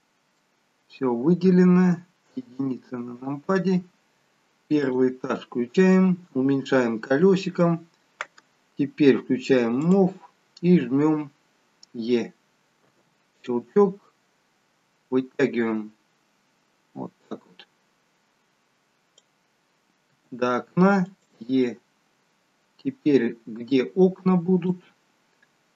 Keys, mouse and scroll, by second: 2.3 KP_1, 4.8 click, 5.5-7.2 scroll down 4, 7.2-7.8 scroll down 1, 9.8 click, 12.9 e, 14.0 click, 20.1 e, 21.7 click.